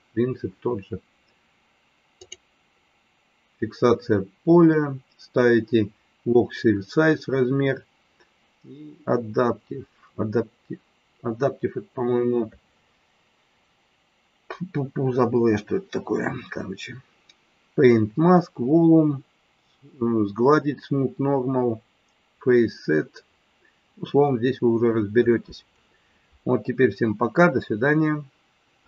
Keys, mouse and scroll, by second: 2.1 click.